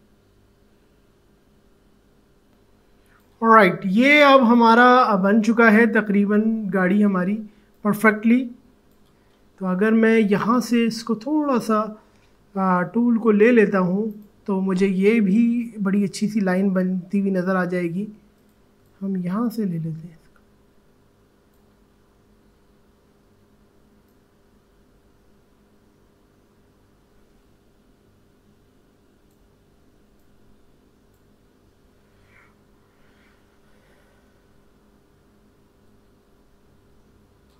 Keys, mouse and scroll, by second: 14.1 click, 16.9 click, 18.7 ctrl+alt+z, 18.8-24.1 alt+drag, 24.1-35.6 drag, 35.6 ctrl+z.